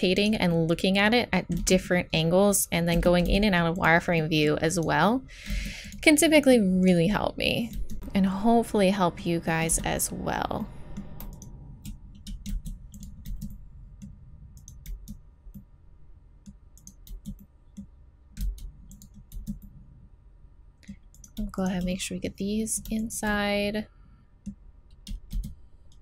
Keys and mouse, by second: 1.6 z, 1.6 right click, 3.0 z, 3.3 x, 5.5 x, 7.7 z, 9.7 z, 12.5 x, 13.3 z, 14.9 z, 17.1 z, 17.6-18.6 middle drag, 18.4 x, 19.3 z, 19.6 middle click, 20.5 middle click, 21.1-22.8 right drag, 23.3-25.3 middle drag, 25.3 x.